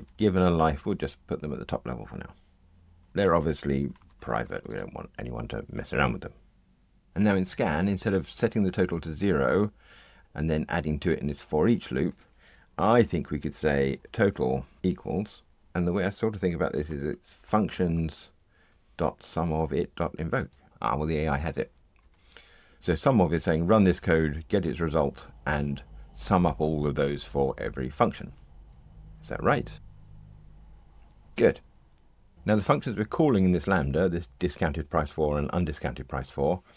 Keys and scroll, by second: 20.4 Tab, 22.0 super+BackSpace, 29.7 ctrl+r.